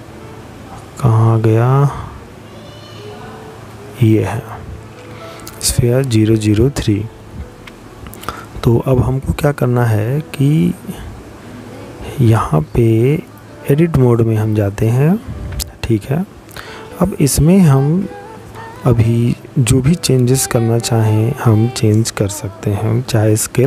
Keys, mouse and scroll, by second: 6.1 middle click, 8.2-8.9 scroll up 2, 10.9 click, 23.3 click.